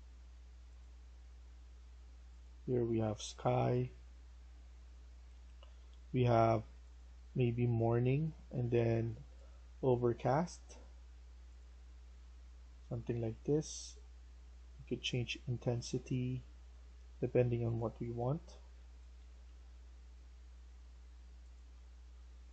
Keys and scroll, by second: 18.2-19.9 typing.